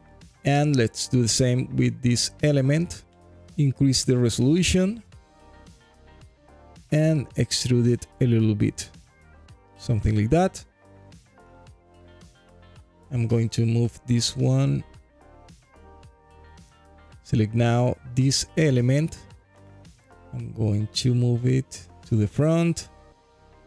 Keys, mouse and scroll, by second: 1.0 alt+click, 2.3-4.3 drag, 7.4-9.3 drag, 8.3 KP_0, 10.5-11.4 alt+drag, 11.7 scroll up 1, 12.0 alt+click, 13.3 g, 13.4 y, 15.4 click, 15.8-16.8 alt+drag, 17.3 click, 17.7 alt+middle click, 18.2 scroll down 1, 18.7 alt+click, 19.6 g, 19.8 y, 21.3 click, 23.5-23.6 drag.